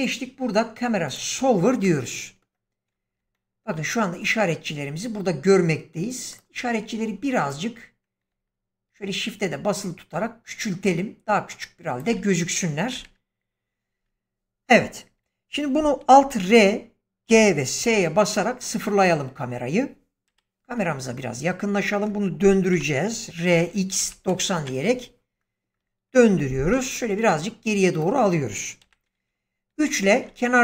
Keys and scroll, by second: 12.9 0, 16.4 alt+r, 17.2 alt+g, 17.7 alt+s, 20.2 ,, 22.6-24.2 typing, 24.4 Return, 26.6 g, 28.7 3.